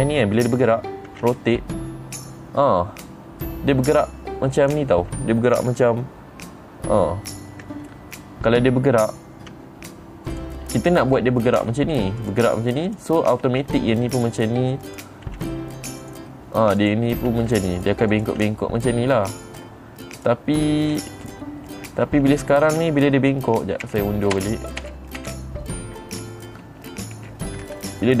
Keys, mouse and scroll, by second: 1.6 r, 5.2 right click, 5.7 middle click, 8.2-8.5 scroll up 2, 8.4 middle click, 8.7 middle click, 10.0 r, 10.8 right click, 12.0 r, 12.7 click, 13.4 click, 14.0 r, 14.7 click, 15.4 click, 15.8 r, 16.6 right click, 17.3 click, 17.8 r, 18.6 click, 19.0-20.1 middle drag, 20.7 click, 21.3 middle click, 24.4 ctrl+z, 24.9-28.2 ctrl+z.